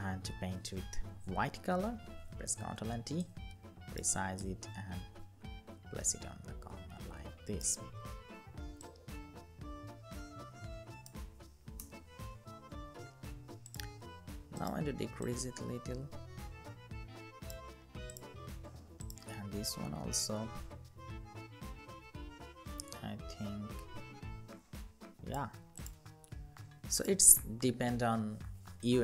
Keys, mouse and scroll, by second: 1.6 ctrl+t, 2.9 alt+shift+click, 8.5 alt+shift+click, 11.5 Return, 26.7 ctrl+click.